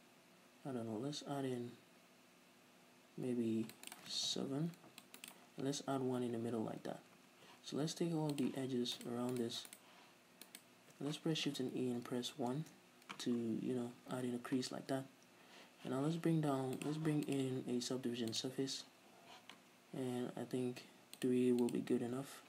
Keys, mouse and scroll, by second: 4.1 click, 4.3 right click, 4.4 ctrl+r, 5.4 right click, 6.0 a, 8.6 click, 9.1 alt+right click, 9.5 alt+shift+right click, 9.8 alt+shift+right click, 10.7 alt+shift+right click, 11.6 shift+e, 12.9 Return, 13.7 z, 14.1 scroll down 2, 14.3 Tab, 14.4-16.3 middle drag, 16.9 click, 17.4-22.3 drag, 19.4 z, 19.9-20.2 scroll up 2.